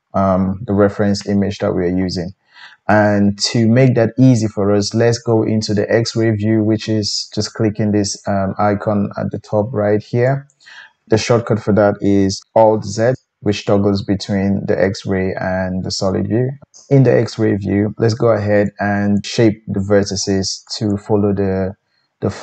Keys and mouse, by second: 10.4-20.9 drag, 12.8 alt+z, 13.2 alt+z, 13.5 alt+z, 13.9 alt+z, 14.3 alt+z, 14.7 alt+z, 15.1 alt+z, 15.8 alt+z, 16.2 alt+z, 19.3 g, 20.9-22.4 middle drag.